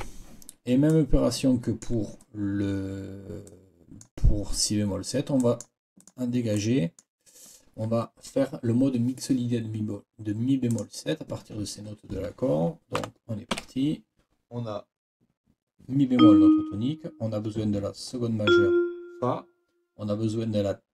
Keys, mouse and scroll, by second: 0.0 Escape, 0.9-2.0 scroll up 2, 3.5 scroll up 2, 6.0 scroll up 1, 6.6-7.2 scroll up 1, 10.7 scroll up 1, 13.0 n, 13.5 5.